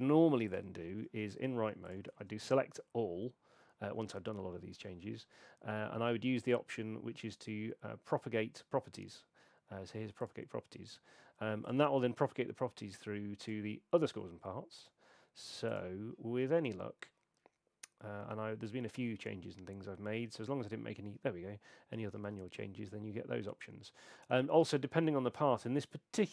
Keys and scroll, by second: 0.9 super+2, 2.1 super+a.